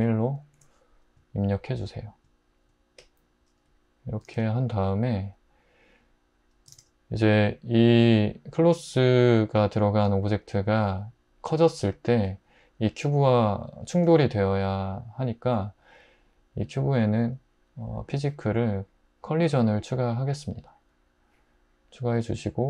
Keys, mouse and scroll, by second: 0.6 Return, 4.3 alt+z, 6.7 alt+z.